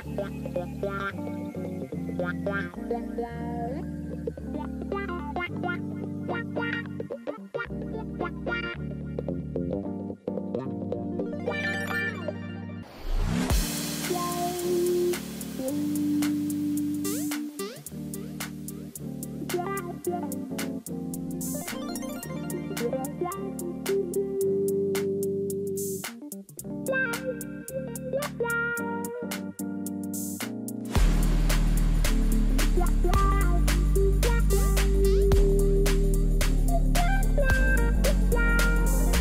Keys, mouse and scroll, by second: 4.5 ctrl+t, 8.1 ctrl+click, 11.6 Down, 13.2 Down, 29.2-32.2 typing, 33.3-36.9 typing, 38.6 y.